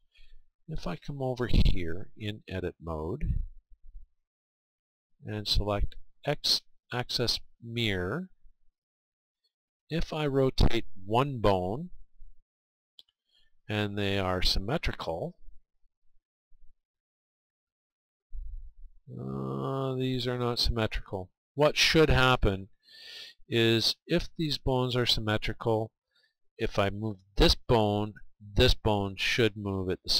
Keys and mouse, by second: 2.7 click, 3.3-9.5 drag, 9.5 middle click, 9.8-15.7 middle drag, 17.4 r, 22.1-23.6 right drag, 23.4 middle click, 23.9-25.0 middle drag.